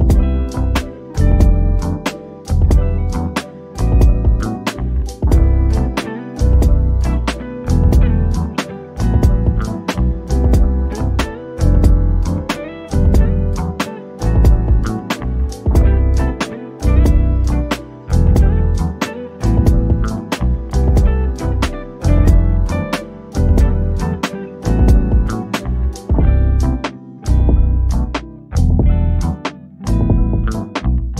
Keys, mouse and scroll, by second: 0.0-0.6 scroll up 1, 1.2 click, 3.3 click, 3.7-4.1 scroll down 1, 4.1 middle click, 4.9 scroll up 1, 5.5 middle click, 6.2-7.4 scroll up 1, 7.4 click, 7.7 scroll down 1, 8.3 scroll, 8.5-9.2 scroll up 1, 10.3 click, 10.6 scroll down 1, 11.0 middle click, 11.7 scroll up 1, 13.3 click, 13.6 scroll down 1, 14.2 middle click, 14.7 scroll up 1, 16.6 click, 16.9-17.5 scroll down 1, 17.5 middle click, 18.0 scroll up 1, 21.9 click, 22.4-22.8 scroll down 1, 22.8 middle click, 23.3-24.8 scroll up 1, 24.8 click, 27.6 click.